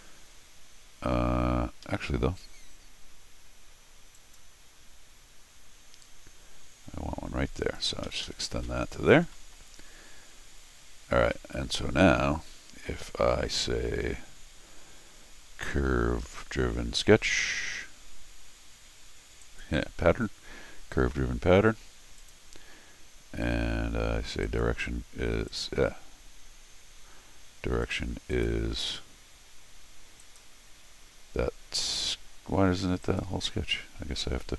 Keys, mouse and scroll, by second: 1.8 Escape, 2.4 l, 4.1 click, 7.6 click, 8.0 Escape, 8.2 Escape, 8.5 middle click, 9.3 middle click, 9.3 scroll down 1, 11.3 r, 19.4 click, 22.2 click, 24.4 click, 25.5 click, 27.8 click, 28.3 click, 30.2 click, 33.0 click.